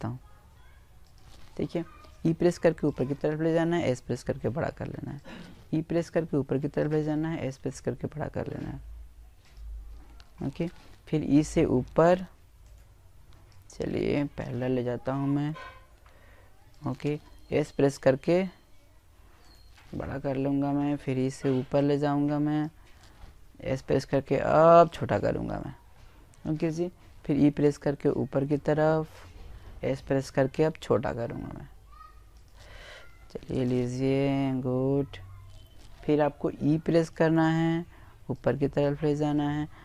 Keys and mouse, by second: 1.3 s, 3.9 e, 4.7 click, 5.3 click, 5.3 s, 5.9 click, 7.3 click, 9.1 e, 10.5-12.3 right drag, 11.3 click, 12.8 s, 14.6 click, 15.5 e, 17.3-19.0 right drag, 19.6 click, 21.5 s, 22.7 click, 25.0 e, 25.5-28.1 drag, 26.2-27.3 right drag, 28.6 s, 30.2 click, 34.6 e, 35.1-37.0 right drag, 36.1 click, 37.4 e, 39.0-39.8 right drag.